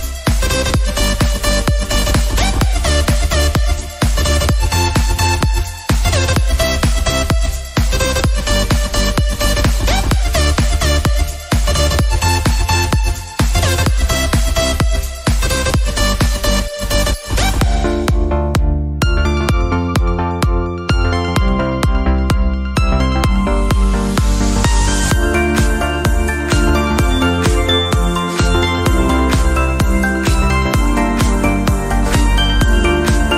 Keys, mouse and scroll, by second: 0.3-1.1 shift+middle drag, 1.1 g, 2.3 scroll down 1, 2.5 shift+middle click, 3.1 shift+d, 5.3-6.4 scroll up 5, 5.7 shift+middle click, 6.4 g, 7.3-8.1 scroll down 2, 7.5 shift+middle click, 8.2 shift+d, 11.5 scroll down 1, 11.7 alt+z, 12.4 click, 12.8 scroll down 1, 13.1-13.7 shift+middle drag, 13.7-14.1 scroll up 5, 14.2-14.5 shift+middle drag, 14.5-14.9 scroll up 5, 15.0-15.6 shift+middle drag, 15.6 click, 16.4 click, 17.3 r, 18.2 g, 19.6 s, 23.4 r, 24.7 g, 26.1 scroll down 4, 26.4-26.7 shift+middle drag, 26.7-27.1 scroll up 5, 27.1-27.5 shift+middle drag, 27.5 drag, 28.0-28.4 shift+middle drag, 28.4 s, 29.5 g, 30.7 r, 31.4 click, 31.6 scroll down 4, 31.8-32.4 shift+middle drag, 32.4 scroll up 1, 32.6 click, 33.0 scroll up 1, 33.2 s.